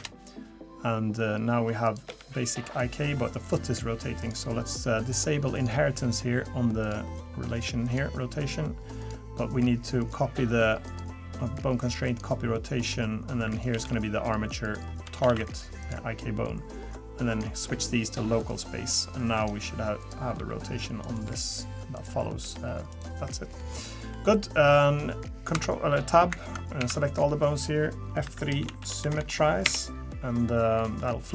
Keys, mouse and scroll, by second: 1.8 click, 2.1 g, 4.2 click, 5.5 click, 6.8 click, 7.8 click, 9.0 click, 10.0 click, 10.9 click, 13.5 click, 14.6 click, 17.3 click, 18.5 click, 20.0 click, 20.4 r, 21.2 g, 22.4 g, 23.6 middle click, 24.1 middle click, 25.5 Tab, 26.8 a, 27.1-28.2 scroll down 3, 28.2 F3, 29.2 m, 31.0 middle click.